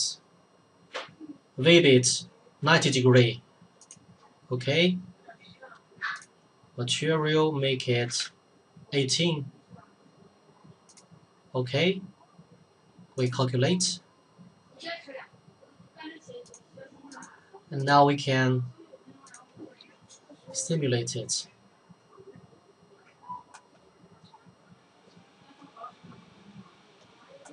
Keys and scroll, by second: 7.8-8.7 typing.